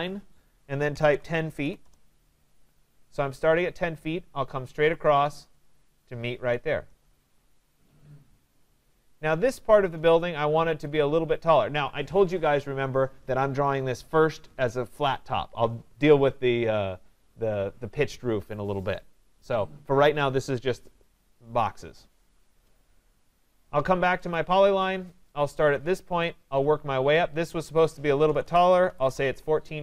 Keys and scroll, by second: 1.8 Return, 29.0 Return.